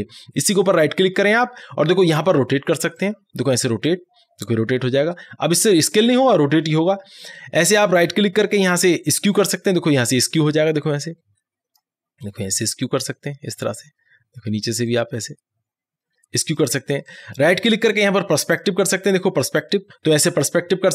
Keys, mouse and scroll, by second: 0.6 right click, 3.0-8.0 drag, 8.0 right click, 9.4-17.2 drag, 17.2 right click, 18.6 click.